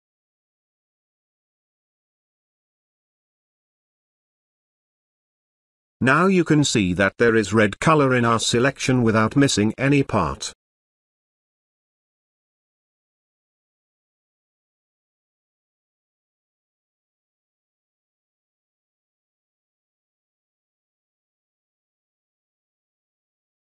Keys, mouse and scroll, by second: 1.0-4.4 drag, 4.4 click, 9.2-10.1 click, 10.1 space, 10.2-11.5 ctrl+drag, 13.5 space, 13.9-15.1 ctrl+drag, 16.6 ctrl+space, 16.8-17.4 ctrl+drag.